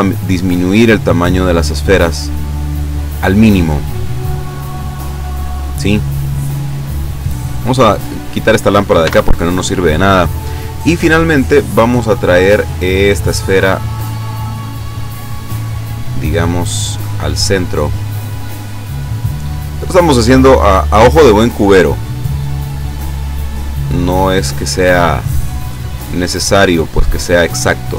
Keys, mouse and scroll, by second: 0.3 click, 0.8 click, 1.3 click, 2.5 click, 3.5 scroll down 1, 3.9-4.3 scroll up 1, 4.6-4.9 scroll down 1, 5.5 scroll down 1, 6.3 scroll down 1, 6.8 scroll up 2, 7.1-7.7 scroll down 4, 8.3 right click, 9.1 x, 9.4 click, 10.3 right click, 11.7-13.3 drag, 13.7-15.2 middle drag, 15.7-17.1 drag, 17.6-18.9 drag, 19.0-19.9 scroll up 3, 19.6 middle click, 21.3-23.3 drag, 23.3-24.6 middle drag, 25.9 click.